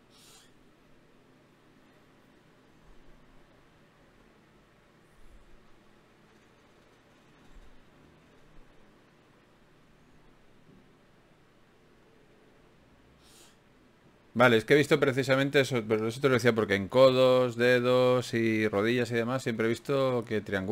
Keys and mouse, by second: 11.1-13.5 right drag, 14.7 d, 14.9-16.9 drag, 18.3 shift+q.